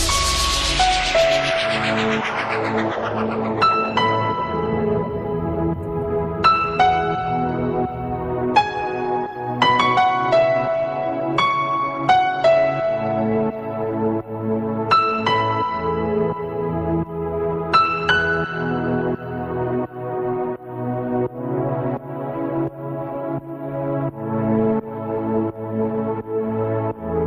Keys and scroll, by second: 20.7 ctrl+space, 22.3 ctrl+alt+z.